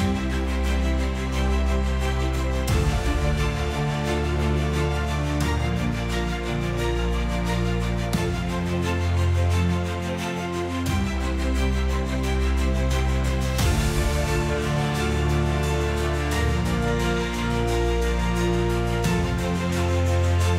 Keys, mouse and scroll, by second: 0.0 click, 1.0 click, 3.3 click, 4.4 click, 5.3 click, 8.3 click, 13.9 click, 15.1 click, 15.3 click.